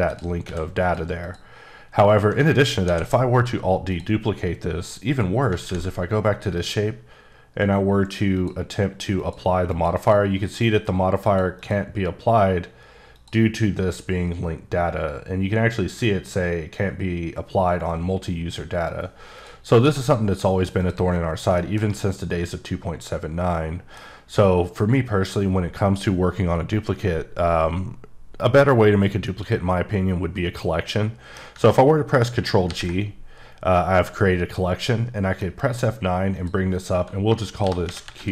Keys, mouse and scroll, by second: 0.1 click, 0.4 x, 0.8 click, 1.2 click, 1.9-2.3 scroll up 1, 2.8 alt+d, 3.3 click, 3.9 click, 6.5 click, 8.3 click, 9.2 click, 9.7 click, 9.9 double click, 11.2 click, 11.6 click, 13.1 click, 19.3 click, 19.8 x, 20.0 click, 20.8 click, 21.2 scroll down 1, 21.6 shift+middle click, 30.9 middle click, 32.6 g, 35.4 F9, 36.3 click, 37.6-38.1 typing.